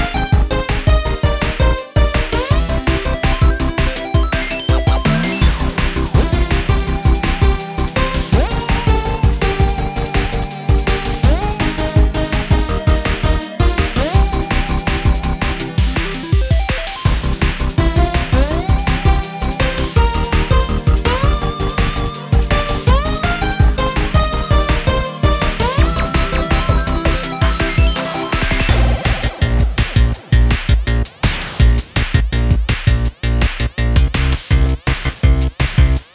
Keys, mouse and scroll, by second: 0.1 middle click, 0.9 alt+shift+click, 2.1 ctrl+b, 3.3 click, 3.8-4.8 middle drag, 4.8 scroll down 2, 5.5-7.1 middle drag, 7.1-8.6 drag, 9.5 ctrl+b, 11.8 click, 12.2-13.9 middle drag, 13.9 click, 15.1 middle click, 15.9 x, 17.5 alt+shift+click, 18.6-19.6 drag, 21.0-25.9 drag, 28.6-30.0 drag, 30.9-32.2 drag, 32.4 click, 33.4 click, 34.0 scroll up 2, 34.3 scroll down 1, 34.4-36.1 middle drag.